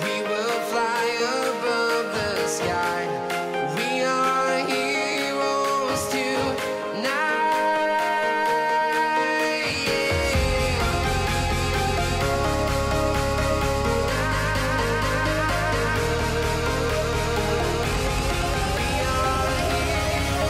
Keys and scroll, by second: 1.9 ;, 2.6 BackSpace, 3.0 =, 4.3 BackSpace, 4.6 [, 5.2 BackSpace, 6.3 shift+[, 12.9 -.